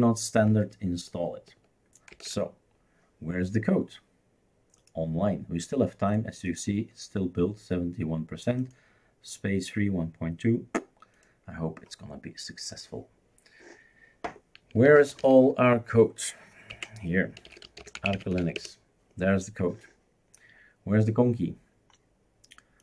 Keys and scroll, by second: 2.1 super+f, 14.9-15.2 typing, 16.7 Right, 17.2-18.9 typing.